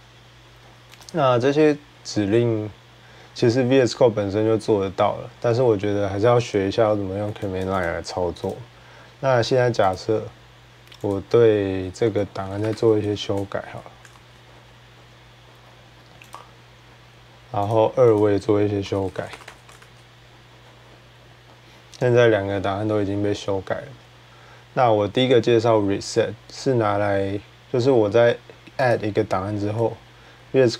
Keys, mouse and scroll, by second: 0.8-5.9 drag, 7.4 click, 7.6 click, 8.3 click, 9.7 click, 10.9 click, 11.8 Return, 12.0-13.4 typing, 13.9 ctrl+s, 15.8-17.0 typing, 16.2 click, 17.5 click, 18.0 click, 18.4-19.9 typing, 28.7 click.